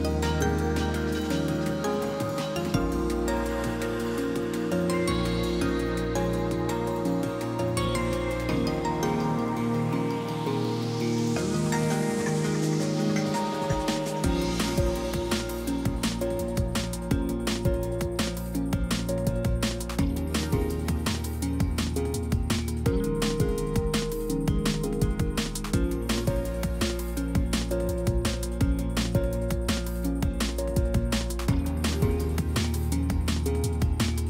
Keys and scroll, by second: 2.8 ctrl+b, 9.2 F8, 11.0 a, 18.0 F8, 18.7 n, 20.9 F8, 21.5-23.3 typing, 24.7 F8, 25.1-26.3 typing, 27.5 F8, 28.4 a, 29.2 2, 32.2 F8, 32.9-34.0 typing.